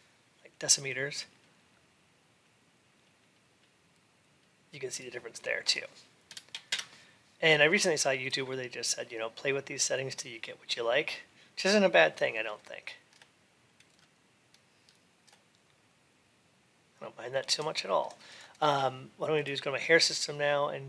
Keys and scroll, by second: 6.5 Return.